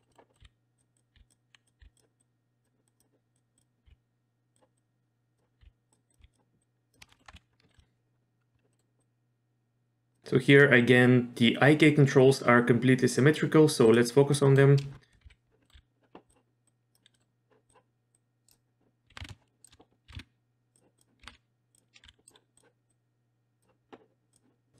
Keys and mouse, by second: 0.0 middle click, 0.3 middle click, 0.4 r, 1.1 r, 1.6 click, 1.8 r, 2.2 click, 2.9 click, 3.3 click, 3.6 click, 3.8 r, 4.8 click, 5.6 r, 6.1 click, 6.2 r, 6.6-6.9 drag, 7.0 shift+middle click, 7.1 middle click, 7.3 KP_3, 7.7 shift+middle click, 8.7 middle click, 9.0 click, 13.8 click, 14.3 middle drag, 15.2 KP_Decimal, 15.6 middle click, 15.7 w, 16.3 click, 16.7 click, 17.1 middle drag, 17.7 click, 18.1-18.5 drag, 19.1 r, 20.1 r, 21.2 r, 22.0 w, 22.3-22.6 drag, 22.9 click, 24.3 click.